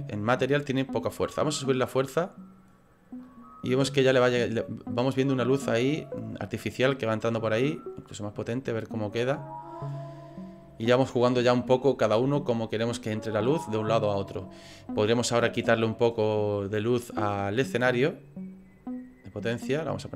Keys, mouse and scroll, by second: 1.3 click, 7.2 click, 10.2 right click, 15.4 right click, 18.2 click.